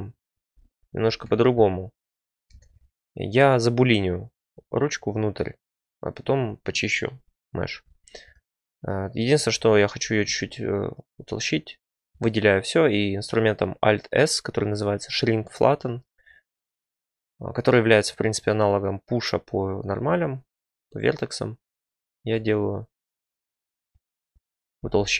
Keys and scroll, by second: 0.4 Tab, 2.5 Tab, 9.5 Tab, 12.0 alt+s, 22.3 Tab, 24.8 g.